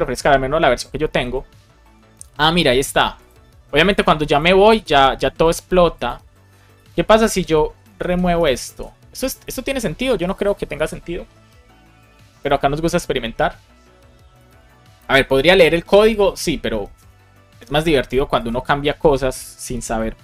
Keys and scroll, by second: 7.8 shift+super+Left, 8.3 BackSpace, 8.6 super+s, 20.1 super+r.